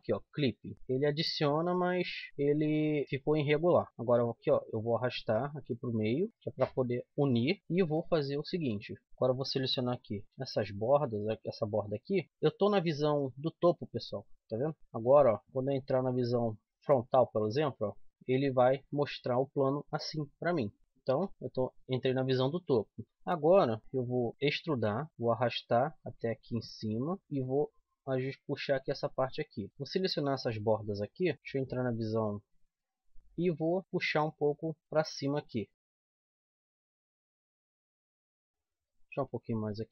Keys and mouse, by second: 0.7 x, 0.7 z, 0.8 middle click, 2.3 z, 2.7 middle click, 4.1-5.9 drag, 5.9 middle click, 6.3 click, 7.3 click, 8.1-10.6 drag, 10.1 c, 13.3 KP_7, 16.6 KP_1, 17.9 KP_3, 18.1 KP_7, 21.1 KP_7, 23.8 middle click, 24.4 e, 25.1-26.7 drag, 26.7 middle click, 27.2 right click, 27.4 click, 28.3 middle click, 29.7 c, 31.0-32.2 right drag, 31.3 KP_1, 33.8 click, 34.8-35.9 middle drag, 36.7 Tab, 37.2 z, 38.2 Tab.